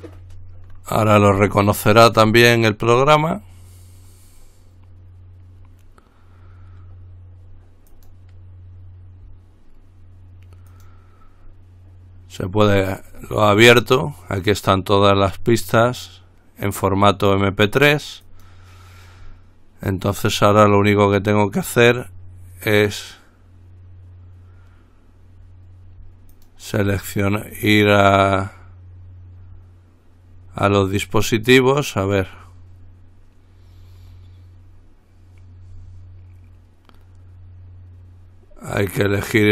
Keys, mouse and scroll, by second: 8.2 click, 10.9 click, 18.5 click, 21.4 click, 26.5 click, 27.8 click, 31.4 click.